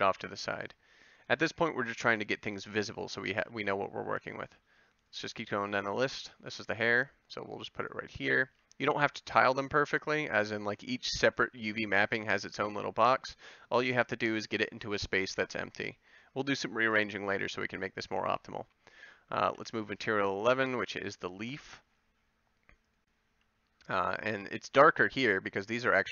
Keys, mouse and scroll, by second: 3.5 a, 5.8 g, 8.5 a, 19.4 g, 23.3 a.